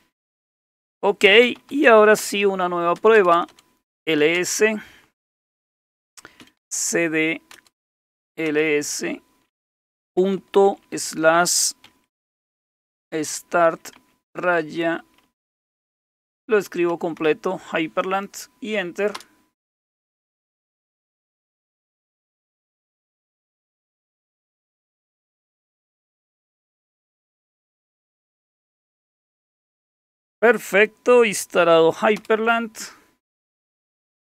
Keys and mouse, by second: 1.2-2.5 typing, 3.0 Return, 3.1 Return, 3.3 Return, 3.5 Return, 4.0 typing, 6.2-8.8 typing, 10.1-17.7 typing, 18.9-19.6 typing, 29.1 click, 30.0 click, 30.2 click, 32.2 super+Return.